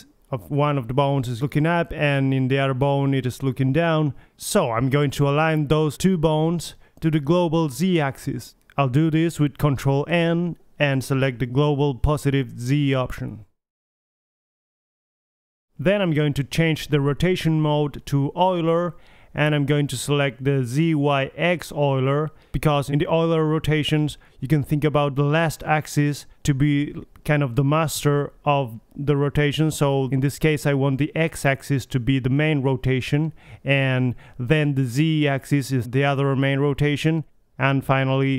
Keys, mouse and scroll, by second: 0.5 Tab, 2.2 middle click, 3.0 click, 3.2-5.1 middle drag, 5.2-7.1 middle drag, 10.6 ctrl+n, 13.8 middle click, 14.1 middle click, 16.1 Tab, 17.1 click, 17.2 middle click, 17.4-18.3 middle drag, 22.9-23.3 drag, 22.9 n, 24.0-25.5 drag, 25.5 middle click, 27.2-29.3 middle drag, 30.4 click.